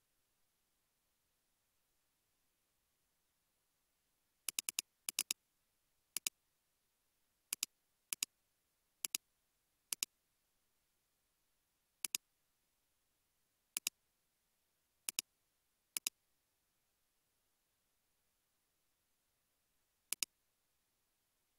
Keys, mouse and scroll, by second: 0.8 space, 2.0 space, 2.7 space, 4.7 double click, 11.5 ctrl+z, 19.1 space, 19.6 space.